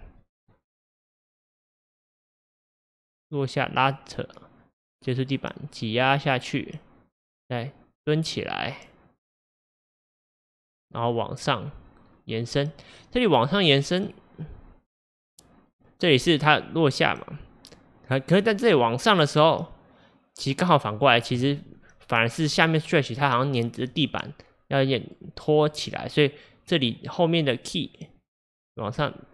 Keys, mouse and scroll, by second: 0.3-3.3 drag, 24.0-27.0 drag.